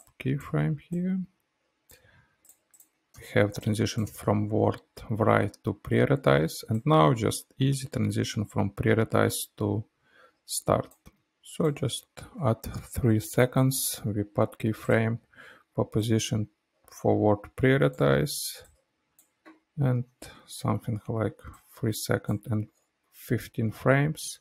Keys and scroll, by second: 3.1 space.